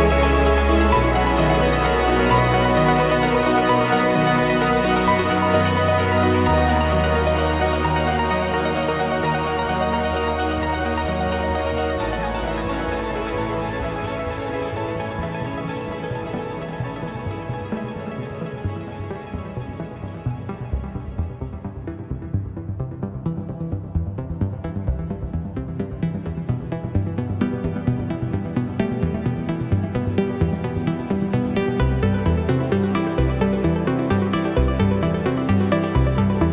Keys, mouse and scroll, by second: 0.5 1, 2.2 click, 3.6-5.8 drag, 6.4-8.7 drag, 8.9 click, 10.1 1, 10.5 2, 11.1 scroll down 2, 11.6 scroll up 2, 12.4-13.7 drag, 14.6 click, 15.4-18.5 drag, 18.5 0, 18.9 scroll down 2, 19.4 click, 21.4 click, 24.2 click, 25.1-27.8 drag, 28.9 click, 29.9 click, 31.1 click, 31.9 click, 33.1 click, 34.9 click, 35.8 click, 36.3 click.